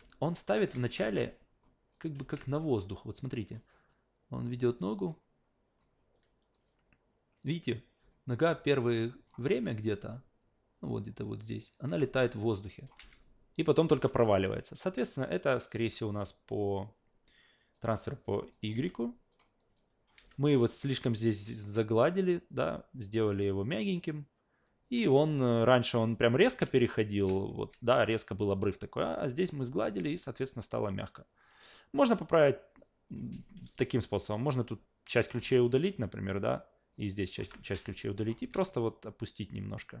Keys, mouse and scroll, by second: 0.3 alt+shift+middle click, 0.6 alt+shift+v, 0.8 alt+shift+middle click, 1.0 alt+shift+v, 1.3 alt+shift+middle click, 1.9 alt+shift+right click, 2.2 alt+shift+v, 2.7-3.5 shift+drag, 3.7 alt+shift+middle click, 4.8 alt+shift+right click, 5.2 alt+shift+middle click, 6.6-7.7 shift+drag, 8.1 alt+shift+middle click, 8.5 alt+shift+middle click, 10.0-12.9 shift+drag, 13.0 alt+shift+v, 13.9 alt+shift+v, 14.2 shift+click, 17.7 shift+click, 18.5 shift+click, 18.7 shift+f, 19.3 shift+click, 19.7 shift+click, 20.2 shift+f, 20.6 shift+click, 23.1-25.0 shift+drag, 25.9-26.3 shift+drag, 26.4 shift+w, 26.7-27.2 shift+middle drag, 27.6 ctrl+z, 33.1 click, 34.4-35.3 drag, 35.4 Delete, 36.9-37.3 drag, 37.4 Delete, 38.0 drag, 38.3 w, 38.6-40.0 shift+middle drag.